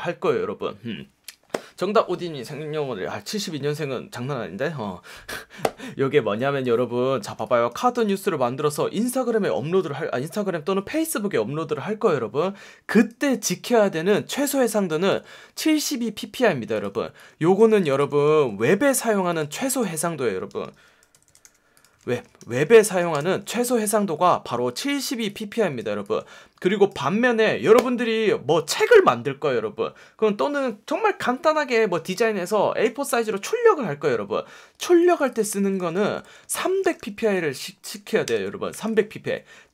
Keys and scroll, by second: 7.2 space, 14.7 space, 18.1 super+a, 19.1 t, 19.8 y, 20.6 Escape, 21.1-23.3 typing, 22.0 super+a, 35.6 super+a, 35.7-37.5 typing, 38.2 super+Return, 38.6 v.